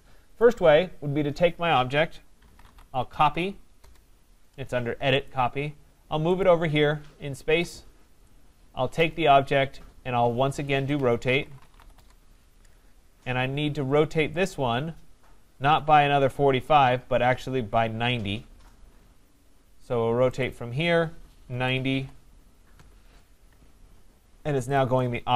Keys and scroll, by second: 3.8 Return, 7.6 Escape, 11.9 Return, 22.7 Return.